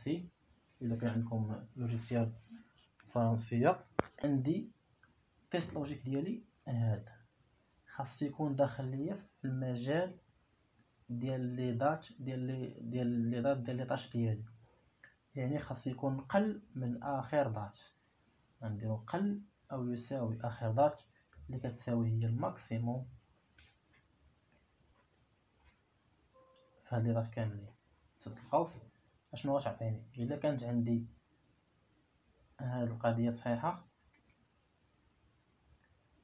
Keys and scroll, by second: 19.1 \, 20.1 =, 22.4-23.2 typing, 24.4 5, 28.3 [.